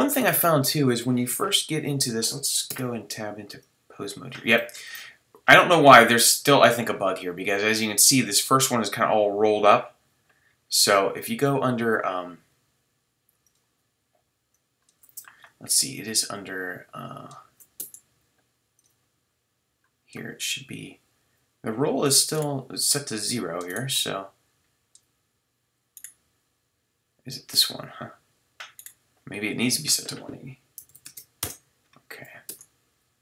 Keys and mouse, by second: 2.7 Tab, 5.7-7.9 drag, 7.9-13.4 middle drag, 13.4-17.8 drag, 17.8 Tab, 22.3-25.3 middle drag, 32.5 Tab.